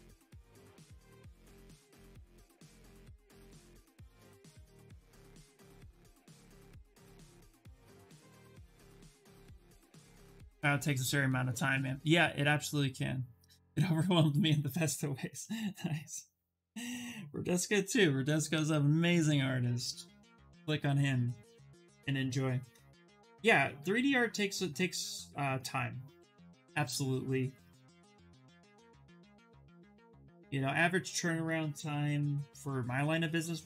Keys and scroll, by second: 28.8 b, 29.1 d, 31.8 b, 32.1 d.